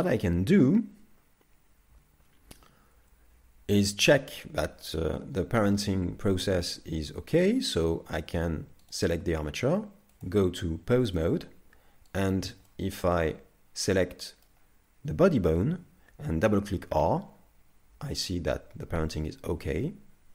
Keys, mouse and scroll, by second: 3.0 z, 3.0 KP_3, 5.6 middle click, 8.9 right click, 10.2 click, 12.2 right click, 12.7 middle click, 16.5 r.